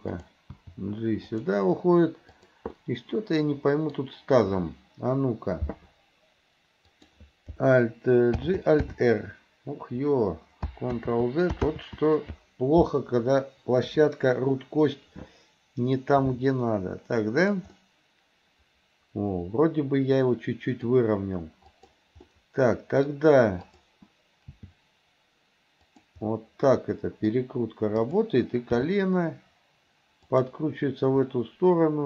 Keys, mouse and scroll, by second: 0.2 click, 0.6 g, 2.3 click, 2.8-4.0 middle drag, 4.0 scroll down 1, 7.0 click, 8.5 alt+g, 8.9 alt+r, 11.1 ctrl+z, 11.8 ctrl+z, 13.9 KP_7, 16.2 r, 17.8-20.9 middle drag, 21.7 click, 22.3 middle click, 23.7 click, 24.5 g, 26.3-27.4 middle drag, 28.1 click, 28.8 g, 31.3-32.0 middle drag.